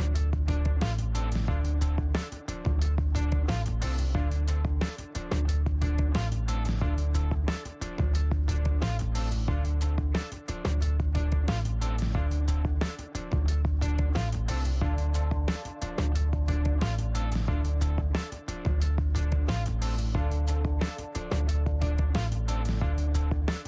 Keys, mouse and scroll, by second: 2.7 click, 2.9 space, 4.2 shift+right click, 5.5 shift+right click, 6.4 shift+middle click, 7.9 shift+right click, 8.1 shift+middle click, 9.3 scroll up 1, 11.8 click, 13.8 click, 15.6 click, 16.1 click, 16.8 shift+right click, 18.2 scroll up 1, 19.3 scroll up 1, 20.8 click, 22.4 shift+right click.